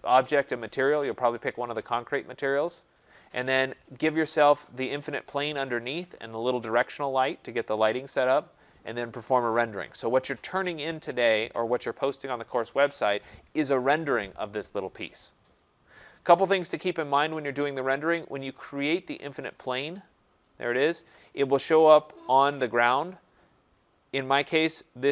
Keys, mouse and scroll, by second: 19.7 click, 21.5 right click, 24.2 right click.